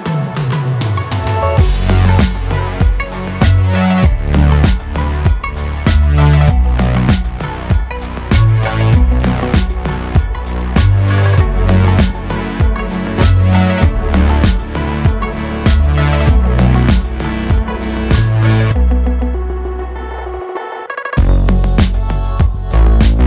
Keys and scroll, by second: 9.7 shift+g, 23.0 Tab.